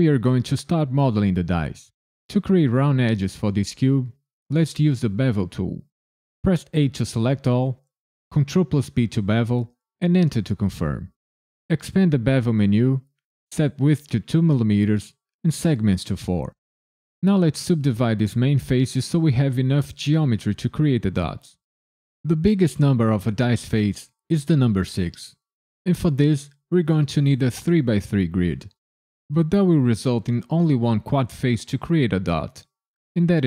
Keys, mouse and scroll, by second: 5.2 1, 6.4 a, 8.3 ctrl+b, 10.0 KP_Enter, 11.7 click, 13.0 click.